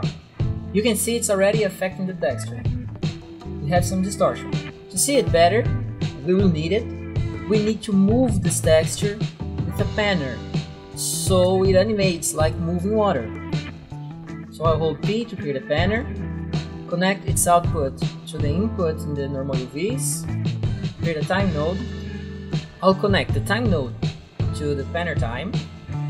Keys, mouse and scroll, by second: 1.7-3.7 scroll up 4, 3.7 scroll up 1, 6.2 click, 10.3 click, 11.5 right click, 11.9 click, 12.7 click, 13.9 right click, 14.0 right click, 14.9 p, 15.1 click, 16.0 click, 17.4 click, 19.9 click, 20.6 right click, 21.0 right click, 21.3-22.3 typing, 25.6 click.